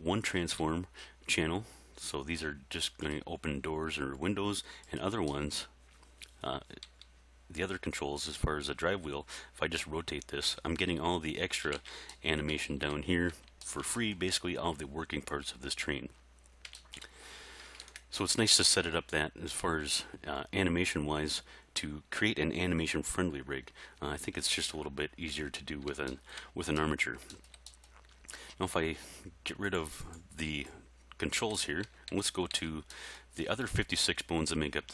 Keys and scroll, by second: 0.6 r, 6.9 r, 11.8 alt+a, 17.8 alt+a, 31.9 a.